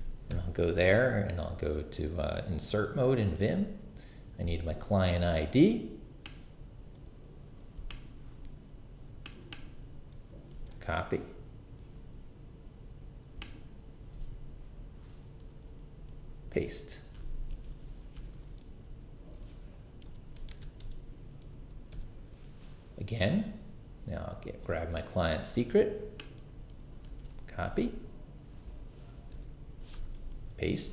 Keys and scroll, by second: 10.5 super+c, 16.1 super+v, 17.5 super+Escape, 18.1 0, 18.8 j, 20.3 shift+/, 20.5 shift+', 20.8 shift+Return, 21.5 i, 27.1 super+c, 29.9 BackSpace, 30.2 super+v.